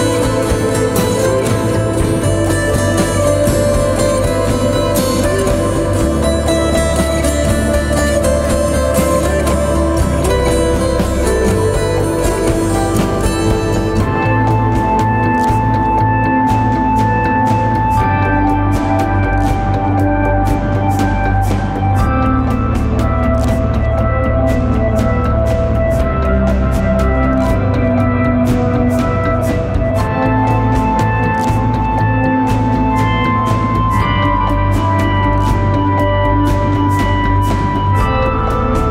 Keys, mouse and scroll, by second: 2.6 double click, 9.7-10.1 typing, 19.6-20.3 scroll down 1, 25.2 right click, 26.6 double click, 37.5 right click.